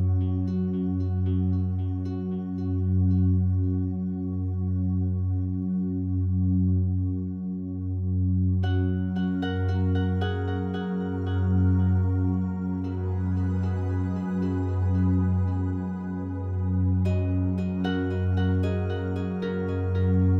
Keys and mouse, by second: 0.1 g, 0.3 1, 0.4 click, 1.3 click, 2.5 f, 3.1 Escape, 3.9 g, 4.2 1, 4.3 click, 5.2 shift+click, 6.3-6.7 typing, 6.7 click, 7.7 shift+click, 7.8 shift+drag, 8.8 g, 9.0 1, 9.1-11.2 drag, 10.0 shift+middle click, 10.3 shift+middle click, 13.4-18.3 drag, 13.4-17.6 middle drag, 17.7 space.